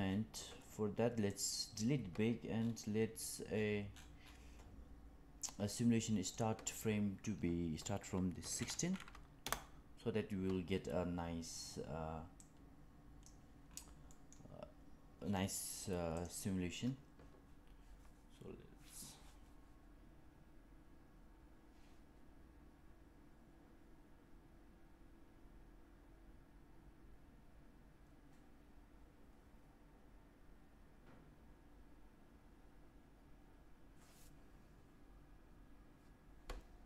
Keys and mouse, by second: 1.2 click, 6.3-11.0 drag, 12.3-13.2 drag, 14.0 middle click, 16.1-36.8 drag.